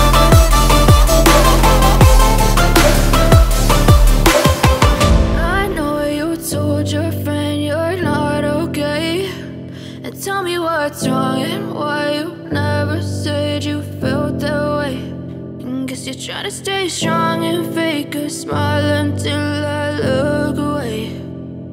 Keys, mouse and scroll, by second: 2.4 ctrl+click, 6.5 ctrl+click, 7.6 ctrl+click.